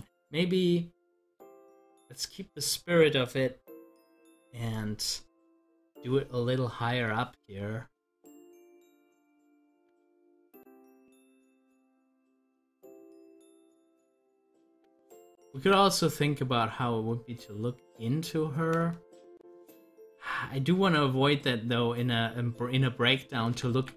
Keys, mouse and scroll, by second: 1.6 Delete, 2.1 click, 2.3 Delete, 3.8 click, 4.0 double click, 7.0 click, 9.7 ctrl+z, 14.6 ctrl+z, 19.4 z, 20.8-23.7 drag, 23.7 z.